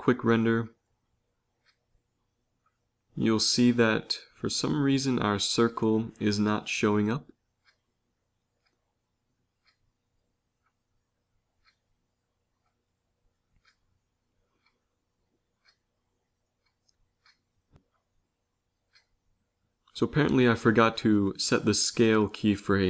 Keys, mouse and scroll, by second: 0.1 shift+z, 1.3-3.3 drag, 3.5-4.3 Right, 4.5 Right, 8.4 Right, 8.6 Right, 8.8 Right, 9.0 Right, 9.3 Right, 9.6 Right, 9.8 Right, 10.0 Right, 10.2 Right, 10.4 Right, 10.7 Right, 10.9 Right, 11.1 Right, 11.4 Right, 11.6 Right, 11.8 Right, 12.0 Right, 12.2 Right, 12.4 Right, 14.9 z, 15.1 z, 16.1 z.